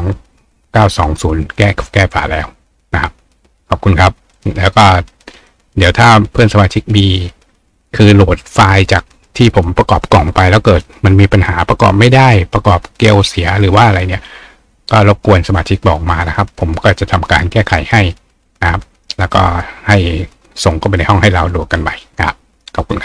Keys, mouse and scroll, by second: 15.3 click, 16.6 right click, 18.9 click.